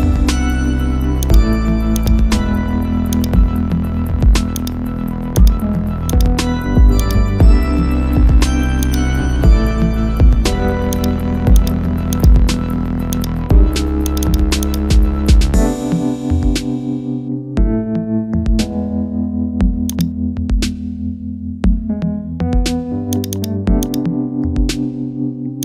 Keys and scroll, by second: 9.8 ctrl+z.